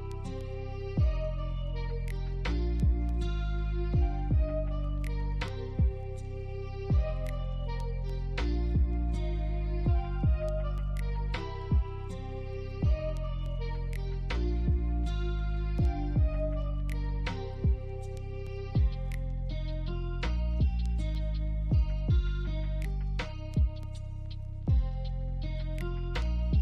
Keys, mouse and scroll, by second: 0.1 BackSpace, 1.1 scroll down 1, 2.3 scroll up 1, 6.8 double click, 9.7 scroll down 1, 10.1 alt+middle click, 10.5-10.8 alt+scroll up 1, 12.7 alt+click, 14.7 double click, 15.2 middle click, 15.9 alt+click, 16.9 alt+middle click, 17.2 alt+click, 17.7 alt+middle click, 18.2 alt+click, 19.7 alt+middle click, 20.1 alt+scroll down 1, 20.6 alt+middle click, 21.1 alt+click, 21.4 alt+middle click, 23.2 double click.